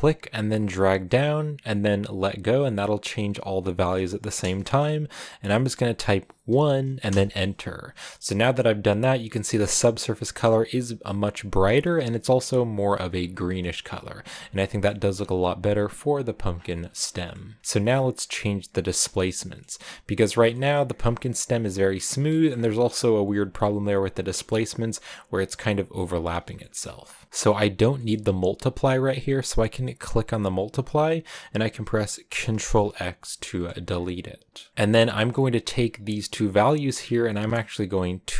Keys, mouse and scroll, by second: 8.3 click, 12.9-13.5 scroll down 4, 14.5-15.7 shift+middle drag, 15.7-16.9 scroll down 11, 16.9-20.9 middle drag, 20.9-22.0 scroll up 1, 22.0 scroll down 1, 22.1 shift+middle click, 22.3-23.1 scroll up 6, 26.1 scroll down 3, 26.4-29.9 shift+middle drag, 29.9-32.4 drag, 32.4 ctrl+x, 33.4-34.7 middle drag.